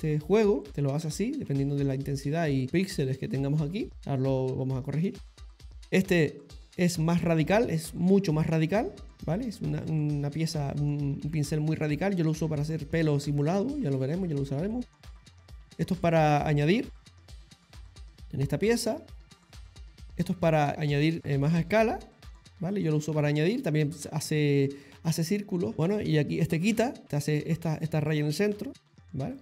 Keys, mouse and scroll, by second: 0.7 click, 1.5 ctrl+z, 5.1 click, 7.8 click, 9.2 middle click, 11.2 ctrl+z, 12.0 middle click, 14.9 click, 15.7 click, 17.6 ctrl+z, 19.7 click, 20.7 click, 22.9 ctrl+z, 23.3 ctrl+z, 25.4 click, 27.0 click.